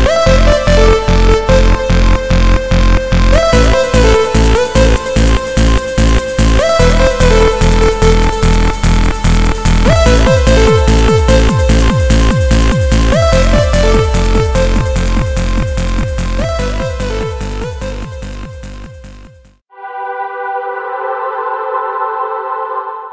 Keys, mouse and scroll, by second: 5.9 click, 7.3-8.6 scroll up 1, 11.9 middle click.